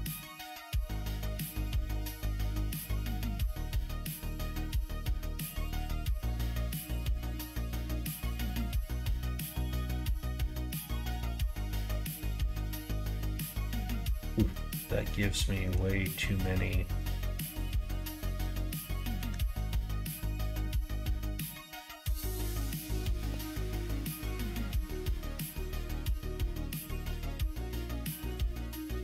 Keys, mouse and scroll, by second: 0.4 click, 0.7 middle click, 1.3 middle click, 1.9 middle click, 2.2 g, 3.8 middle click, 4.4 click, 4.8 g, 5.8 click, 6.0 g, 7.6 click, 7.8 g, 9.6 middle click, 9.8 right click, 10.3 right click, 10.4 middle click, 10.9 shift+right click, 11.1 middle click, 11.5 ctrl+r, 13.7 middle click, 13.8 right click, 14.1 middle click, 15.3 shift+middle click, 16.0 middle click, 19.2 k, 23.7 middle click, 24.5 middle click, 25.0 shift+middle click, 25.9 middle click, 26.5 k.